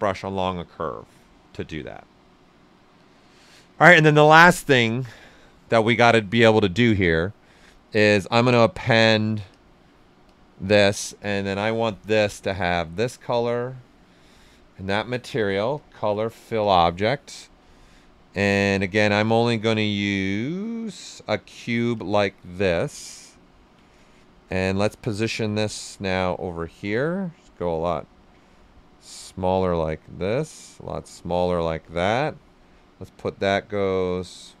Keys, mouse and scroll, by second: 4.5-8.2 drag, 4.5 typing, 8.2 click, 11.2 right click, 12.1-13.5 drag, 13.5-15.7 drag, 15.7 click, 17.6 right click, 18.6 w, 18.9 right click, 19.9 click, 22.5 shift+f, 22.9 right click, 23.8 right click, 24.6 w, 25.4 click, 26.3-28.7 drag, 28.4-30.7 ctrl+right drag, 30.7-34.6 drag.